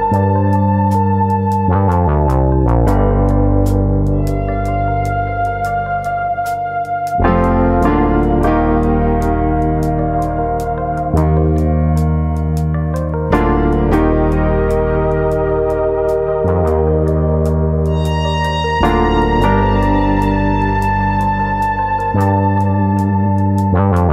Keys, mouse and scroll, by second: 0.0 click, 0.1 middle click, 1.1 e, 3.3 click, 3.4 middle click, 3.8-5.1 scroll down 2, 4.0 middle click, 5.1 2, 5.4 click, 5.7 middle click, 6.2 click, 8.3 click, 10.0 click, 10.0 middle click, 10.4 middle click, 11.1 alt+click, 11.2 alt+click, 11.6 click, 12.8 middle click, 13.4 click, 13.7 middle click, 14.4 click, 14.6 middle click, 15.2 click, 15.8 middle click, 16.7 click, 17.2 click, 17.5 middle click, 18.6 middle click, 19.6 s, 20.2 click, 20.7 click, 22.0 click, 22.0 middle click, 23.0 middle click, 23.6 shift+click, 23.8 shift+click, 23.8 middle click.